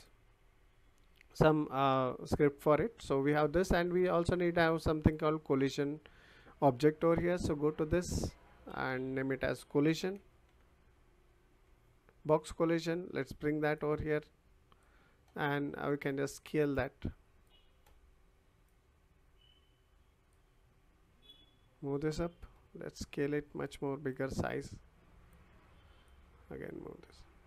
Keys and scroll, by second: 10.0 c, 10.5 o.